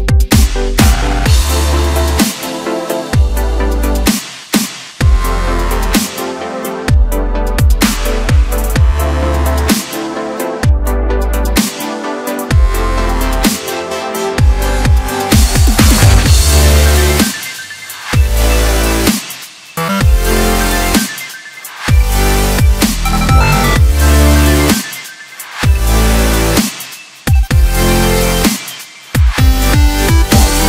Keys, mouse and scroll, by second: 0.8 shift+click, 2.0 m, 5.8 click, 7.8 shift+click, 9.1-11.2 right drag, 11.2 KP_7, 12.1-13.1 scroll up 1, 13.1-14.3 drag, 15.7-17.8 scroll down 1, 17.8 middle click, 18.4-20.9 scroll down 2, 20.9 m, 23.9 KP_7, 25.3 click, 26.0 scroll up 2, 27.3 click, 28.0 click, 28.6 click, 29.1 click, 29.6 click, 30.0 click, 30.5 click.